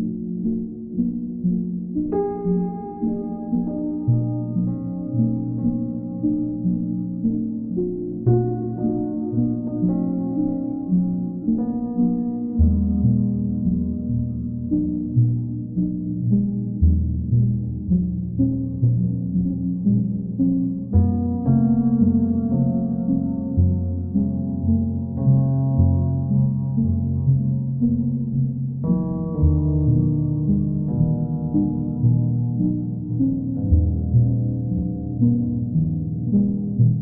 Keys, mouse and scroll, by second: 1.4 click, 2.2 click, 3.1 click, 3.4 shift+click, 4.2 shift+click, 4.2 alt+click, 8.2-9.3 drag, 9.4-10.4 drag, 12.7 click, 15.1 ctrl+d, 15.7 ctrl+d, 16.9 click, 17.2 shift+click, 18.0 alt+click, 19.1 click, 20.3 click, 21.4 shift+click, 22.0 alt+click, 23.5 alt+click, 24.5 ctrl+middle click, 27.8 ctrl+click, 28.6 ctrl+click, 29.3 w, 33.1 click, 34.6 click, 35.0 shift+click.